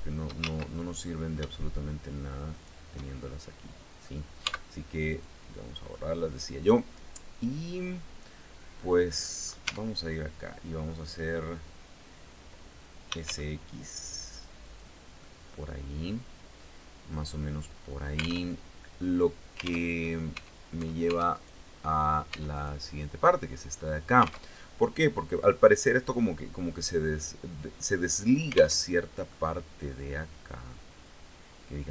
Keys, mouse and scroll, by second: 0.0 ctrl+shift+z, 0.3 ctrl+shift+middle click, 2.1 shift+right click, 2.7-3.8 shift+middle drag, 4.0 x, 4.7 click, 5.1 scroll down 2, 5.5-9.2 middle drag, 9.2 Tab, 12.4-13.4 typing, 14.2 click, 14.7-18.1 middle drag, 18.1 alt+Tab, 19.4 alt+Tab, 20.9 right click, 21.9 Tab, 22.1 right click, 24.0 alt+Tab, 28.3 alt+Tab, 28.9-31.9 drag.